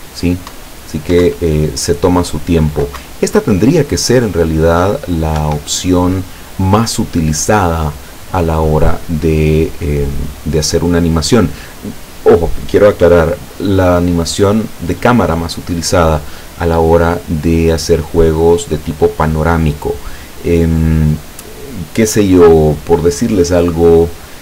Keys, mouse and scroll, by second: 0.6 Up, 1.3 Down, 3.1 Up, 5.5 Escape.